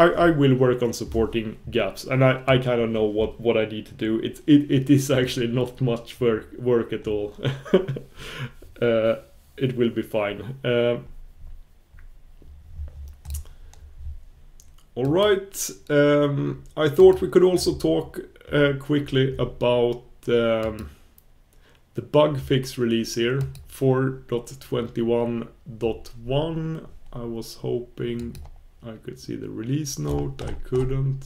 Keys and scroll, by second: 21.8 super+b.